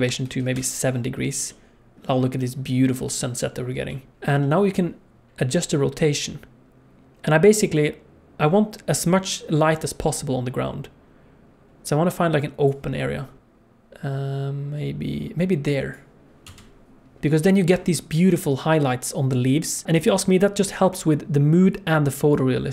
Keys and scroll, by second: 16.4 KP_0.